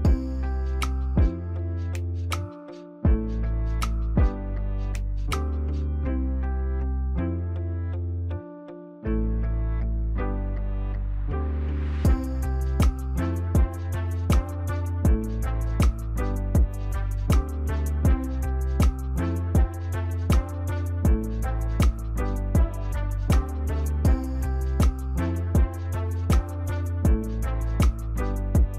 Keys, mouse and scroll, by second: 1.4 shift+click, 3.4 shift+click, 6.0 ctrl+-, 6.8 ctrl+-, 6.8 ctrl+=, 7.2 ctrl+=, 7.5 ctrl+=, 8.8 Up, 10.3 Down, 11.0 Down, 11.2 Down, 11.5 Down, 11.8 Down, 12.2 Down, 15.3 ctrl+-, 15.7 ctrl+-, 16.4 ctrl+-, 17.2 ctrl+-, 17.7 ctrl+=, 18.0 ctrl+=, 18.4 ctrl+=, 23.0 ctrl+t, 23.5 ctrl+right click.